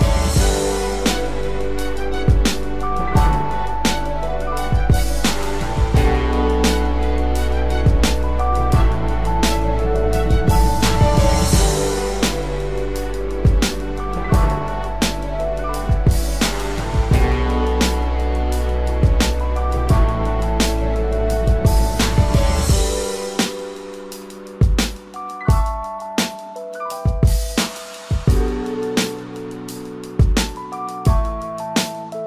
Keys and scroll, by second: 3.0 ctrl+=.